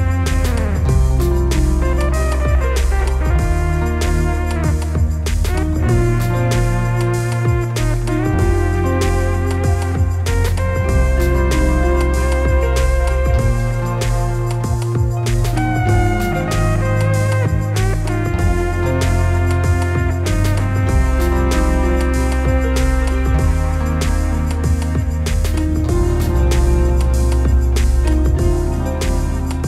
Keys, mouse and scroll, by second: 1.1 scroll up 1, 1.3-2.5 drag, 1.3 scroll down 1, 7.0-9.0 drag, 11.1 Tab, 11.1-14.5 drag, 15.0 click, 16.3-18.3 drag, 17.2 s, 18.3 scroll down 1, 18.5 scroll up 1, 19.7 scroll up 1, 20.3-20.9 scroll down 1, 22.4 scroll up 1, 29.3 click.